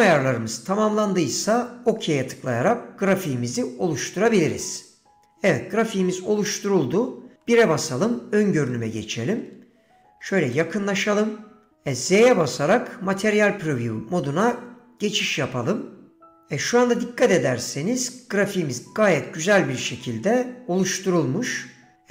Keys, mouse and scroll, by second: 7.6 KP_1, 10.6-11.1 shift+middle drag, 12.3 z.